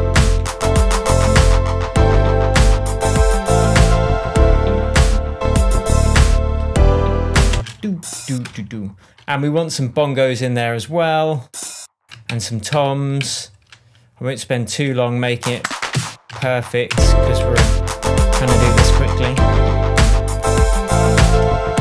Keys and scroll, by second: 7.5 space, 8.4 BackSpace, 12.3 super+d, 16.4 super+d, 16.9 super+space, 17.4 shift+super+space, 17.5 shift+Tab, 19.3 super+s.